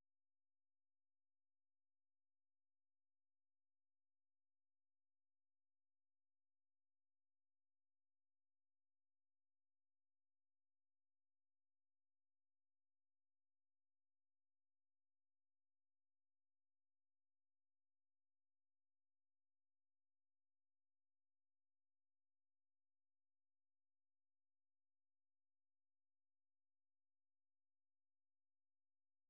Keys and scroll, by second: 2.3-3.3 typing, 4.0 Return, 4.8 Return, 5.2 Return, 5.5 Return, 5.6-6.4 typing, 6.6 Return, 6.9 Return, 7.1 Return, 8.0 ctrl+a, 9.4 ctrl+f, 9.7-10.8 typing, 17.8 Return, 23.9 Return, 24.4 Return, 24.8 Return, 25.1 Return, 25.3 Return, 26.1 Return, 26.6 Return, 27.2 Return.